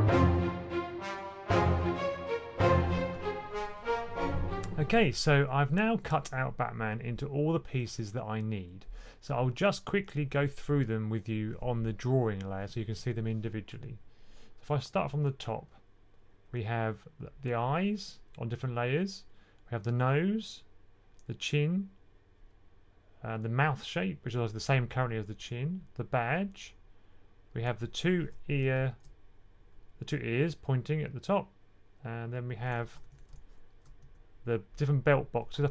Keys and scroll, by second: 0.0-2.4 typing, 0.6 super+8, 32.8-33.9 typing.